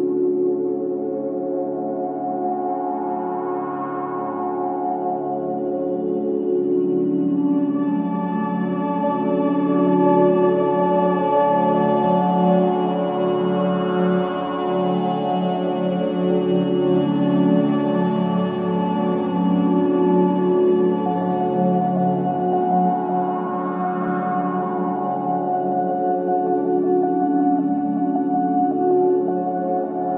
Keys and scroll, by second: 0.7 Escape, 1.0 F2, 2.7 g, 13.9 space, 18.3 ctrl+r.